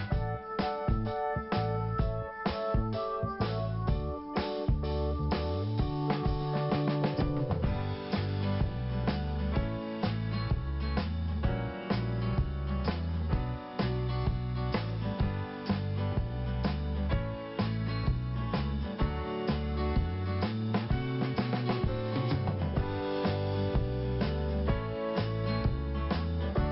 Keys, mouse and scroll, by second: 2.0 click, 2.5 click, 4.0 click, 5.6 click, 6.0 click, 7.6 scroll down 1, 8.8 scroll up 1, 10.5 click, 11.6 click, 12.4 click, 13.1 click, 14.0 click, 14.9 click, 15.5 click, 16.1 click, 17.1 click, 17.2 click, 17.8 click, 19.2 click, 20.0 click, 21.7 click, 22.3 click, 23.4-24.1 scroll down 1, 24.4 p, 26.1 click.